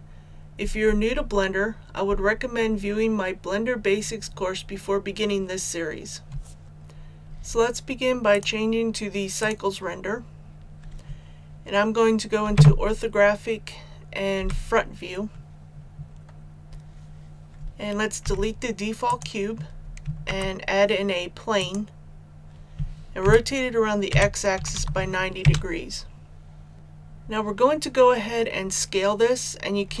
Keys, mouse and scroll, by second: 12.4 KP_5, 14.3 KP_1, 18.2 x, 19.0 click, 20.2 shift+a, 21.5 click, 23.2 r, 24.0 x, 24.5 KP_9, 24.9 KP_0.